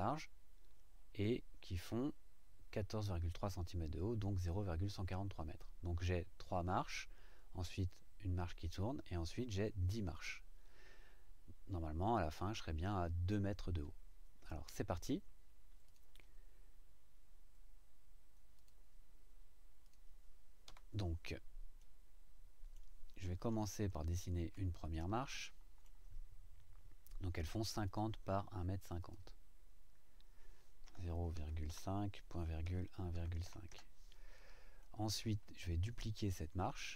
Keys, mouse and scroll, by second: 15.9 click, 18.6 click, 19.8 click, 20.6 Delete, 21.8-22.9 right drag, 23.5-24.7 shift+right drag, 24.9-26.0 shift+right drag, 27.8 click, 29.0 click, 30.8-33.4 typing, 33.7 KP_Enter, 34.8 click, 34.8 middle click.